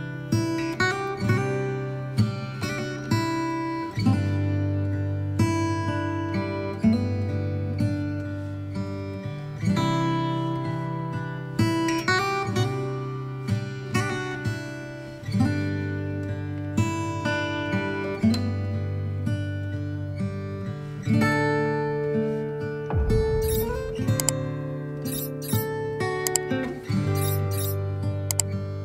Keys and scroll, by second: 5.5 ctrl+z, 12.9 ctrl+d.